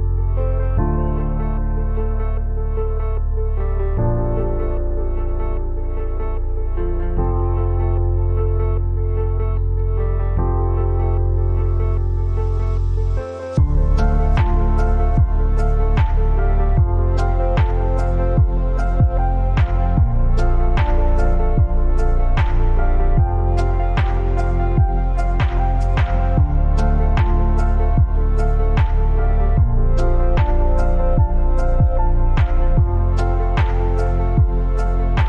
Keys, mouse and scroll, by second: 13.9 click, 17.0 a, 17.3-23.0 drag, 23.1 click, 25.8-26.4 alt+scroll up 1, 26.9 click, 27.0 click, 28.4-35.2 drag.